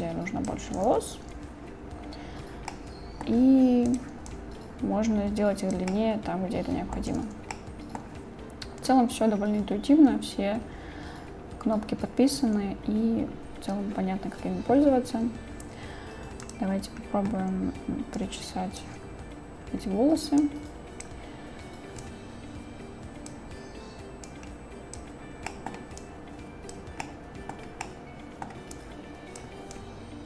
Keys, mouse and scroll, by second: 0.0-0.5 drag, 1.2 ctrl+z, 2.7-3.3 drag, 4.0 click, 4.3-5.8 drag, 5.9-7.0 drag, 7.2 ctrl+z, 7.6-8.0 drag, 16.4 click, 18.3 click, 20.4-21.1 drag, 22.1-23.3 drag, 24.3-25.0 drag, 25.5 middle click, 26.0-26.8 drag, 27.1-27.5 drag, 27.9-28.5 drag, 28.8-29.4 drag, 29.8-30.2 drag.